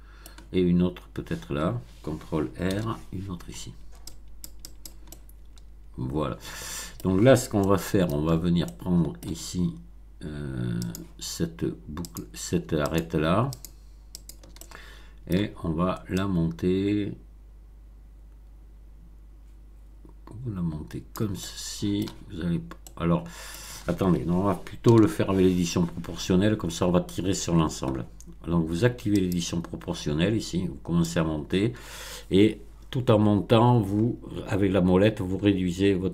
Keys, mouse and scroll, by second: 2.6 ctrl+r, 4.0 click, 5.0-7.1 middle drag, 7.6 shift+middle click, 8.3 shift+scroll up 1, 8.6 middle click, 9.2-10.8 scroll up 1, 10.8 click, 12.0 click, 12.9 shift+click, 13.5 shift+click, 14.1 shift+click, 14.5-15.5 shift+middle drag, 16.1-21.3 drag, 21.3 middle click, 22.8 middle click, 24.8 ctrl+z, 29.1 click, 31.0-33.4 drag, 33.4-36.1 scroll up 10.